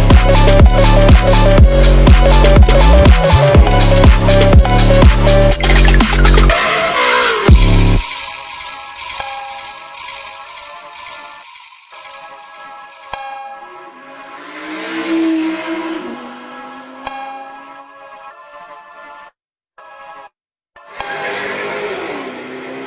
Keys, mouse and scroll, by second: 0.4 scroll down 2, 0.5 click, 1.3-1.9 drag, 2.2 click, 2.6 shift+a, 3.6 Tab, 4.0 Delete, 4.7 click, 4.8-5.3 scroll up 1, 5.3-6.0 scroll down 3, 5.5 click, 6.0 scroll up 1, 6.2 click, 7.0 click, 7.2 shift+a, 8.4-8.8 scroll up 3, 8.8 Tab, 8.9 Delete, 9.5 click, 10.3-11.6 drag, 11.8-12.8 drag, 12.9 click, 13.6-15.1 drag, 15.3-16.6 drag, 16.6 r, 17.0 ctrl+z, 17.2 click, 17.4 r, 18.8 click, 19.1 r, 19.4 click, 19.7 r, 20.3 click, 20.4 r, 21.2 Left, 21.4 Left, 21.6 r, 21.9 Left, 22.0 r.